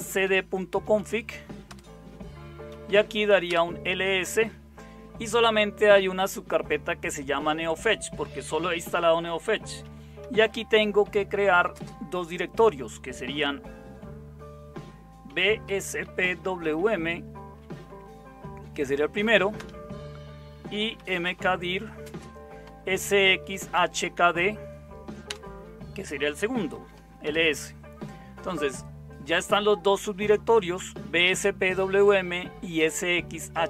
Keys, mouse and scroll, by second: 0.0-3.2 typing, 1.7 Return, 3.5 Return, 10.0-12.0 typing, 15.0-17.1 typing, 19.6 Return, 20.5-24.6 typing, 25.2 Return, 26.5-27.2 typing, 27.2 Return.